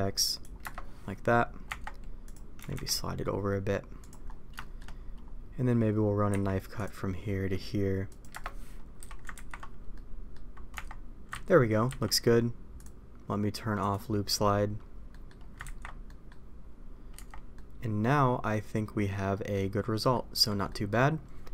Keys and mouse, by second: 1.6 Tab, 2.5 g, 4.5 shift+middle click, 6.2 k, 8.9 a, 9.3 ctrl+t, 9.9 middle click, 10.7 Tab, 11.5 ctrl+z, 12.7 click, 13.8 click, 15.0 middle click, 15.6 ctrl+t, 16.0 middle click, 17.1 Tab, 17.5-19.5 middle drag, 20.1-20.4 middle drag, 20.6 middle click.